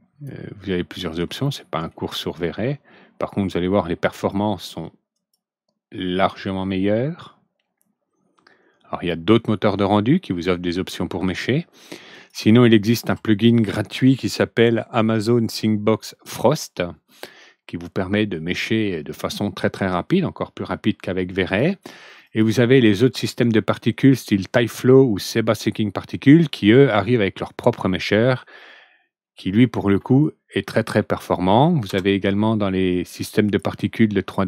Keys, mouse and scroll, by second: 1.4-1.8 middle drag, 1.9 scroll down 2, 4.1 click, 5.1 click, 12.0 click, 21.4 click, 22.2 click, 22.8 ctrl+d, 30.7 click, 31.8 ctrl+d, 32.8 click, 33.4 click.